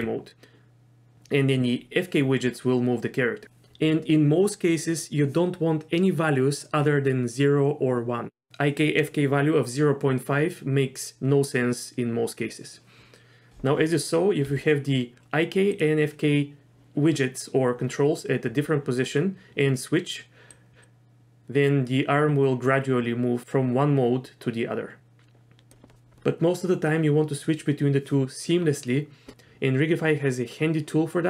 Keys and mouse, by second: 14.4 r, 20.6 click, 20.8-25.7 drag.